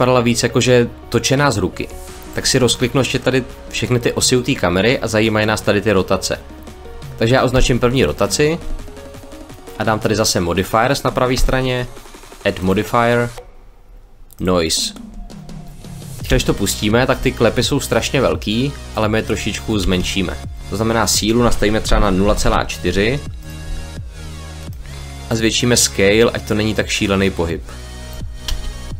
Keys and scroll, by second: 16.1 space, 19.7 space, 21.7 0, 22.1 ., 22.3 4, 28.3 space.